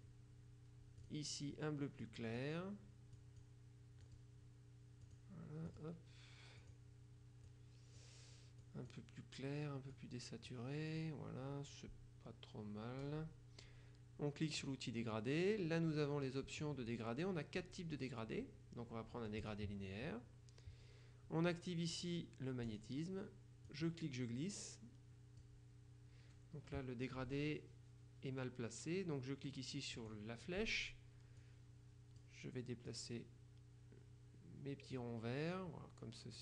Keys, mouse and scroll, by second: 0.0 click, 1.2 click, 2.1 click, 3.3 click, 4.1 click, 5.1-6.4 drag, 5.7 middle click, 6.7 click, 7.5-8.6 drag, 8.7 click, 10.0 click, 14.7 click, 17.1 click, 19.5 click, 22.7 click, 23.7-25.9 drag, 30.1 click, 31.5-32.8 drag, 33.0-35.6 drag.